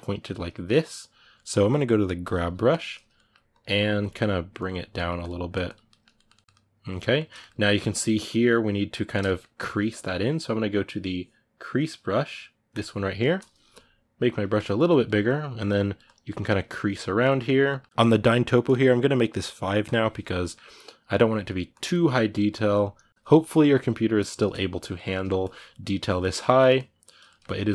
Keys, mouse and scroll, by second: 2.0 g, 2.1 f, 2.9 ctrl+middle click, 3.3-4.7 drag, 4.7 middle click, 5.0 click, 5.6-12.5 ctrl+middle drag, 12.5 click, 13.0-14.0 ctrl+middle drag, 14.0 f, 14.6-17.0 drag, 17.0 ctrl+middle click, 17.9-20.2 drag, 20.2 middle click, 20.5-21.7 drag, 21.7 middle click, 22.0-23.1 drag, 23.1-25.2 middle drag, 25.2-26.2 drag, 26.2 middle click, 26.5 click, 27.0-27.7 ctrl+middle drag.